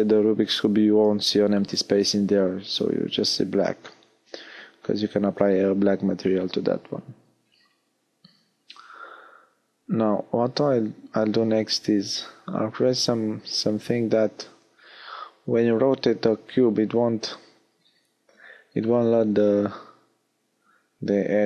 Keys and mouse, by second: 1.7 a, 4.7 middle click, 9.3-15.5 middle drag, 19.3-21.4 middle drag.